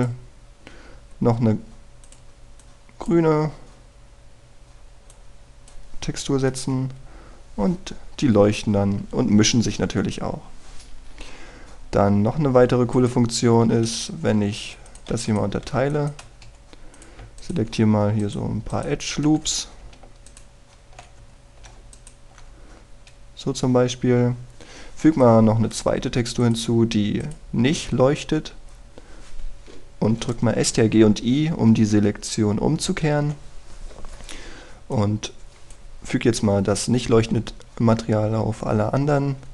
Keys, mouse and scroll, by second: 0.2 click, 2.0-3.0 scroll down 1, 3.0-7.2 drag, 7.8 F12, 13.3 Escape, 14.0 right click, 14.3-14.6 scroll up 1, 14.6 Tab, 15.6 w, 15.9 click, 16.1 w, 16.7 w, 18.4 alt+right click, 19.2 alt+shift+right click, 21.3 alt+shift+right click, 22.3 scroll up 1, 23.0 alt+shift+right click, 23.6-24.1 scroll down 1, 24.8-25.8 scroll up 1, 26.2 click, 36.0-37.2 drag, 38.4 Tab.